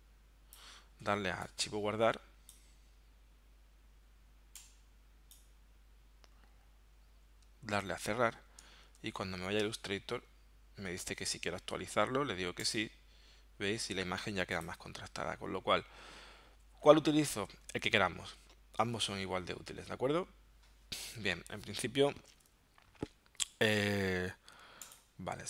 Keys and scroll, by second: 8.3 super+w, 8.9 super+Tab.